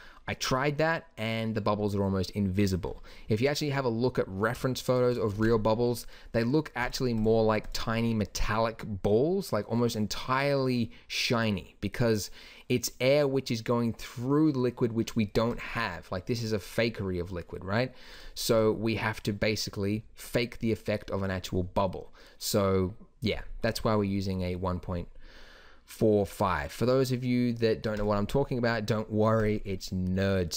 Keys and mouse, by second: 5.3 ctrl+s, 6.8-8.6 drag, 15.6-17.3 drag, 18.2 click, 28.0-30.5 drag.